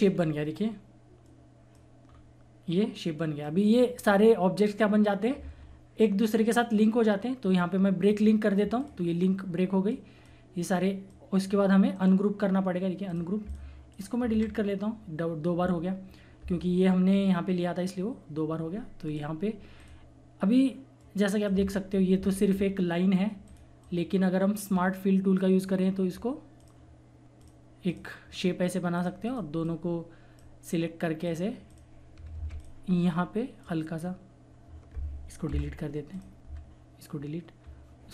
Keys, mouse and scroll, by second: 0.1 scroll up 1, 1.2 click, 2.0 scroll down 1, 3.1 click, 8.0 click, 9.0-11.9 drag, 11.9 right click, 13.0 click, 14.3 Delete, 19.0 click, 22.1 ctrl+z, 23.4-31.2 drag, 32.3 ctrl+z, 32.5 click, 32.9-33.6 scroll up 1, 33.6-35.4 drag, 35.4 Delete, 36.1 click, 36.4 Delete, 37.5 scroll up 1.